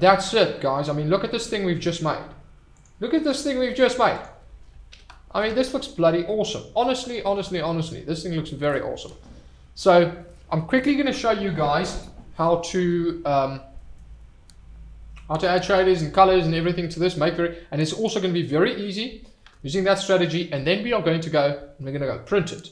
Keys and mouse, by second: 0.5 click, 1.5 middle click, 2.8 click, 4.2 click, 4.9 alt+h, 6.2-6.8 middle drag, 7.4-7.8 middle drag.